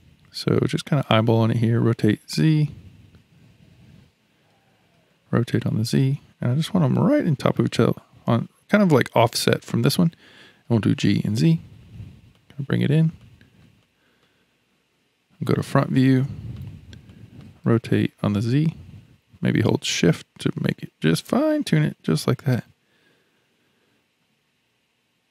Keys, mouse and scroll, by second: 1.1 r, 4.5 r, 10.6 g, 13.2-14.4 shift+middle drag, 14.4-15.4 scroll up 1, 15.4 KP_1, 16.2-16.7 shift+middle drag, 16.7-17.1 scroll up 2, 17.1-17.6 shift+middle drag, 17.6 r.